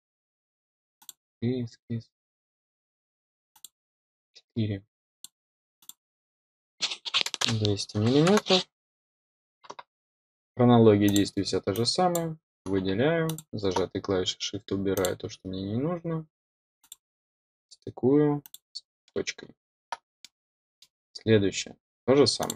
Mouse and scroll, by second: 0.9 click, 3.4 click, 5.1 click, 5.7 click, 11.0 click, 11.7-12.1 drag, 13.2 click, 14.9 click, 16.7 click, 18.3 click, 19.0 middle click, 20.1 middle click, 22.3 click.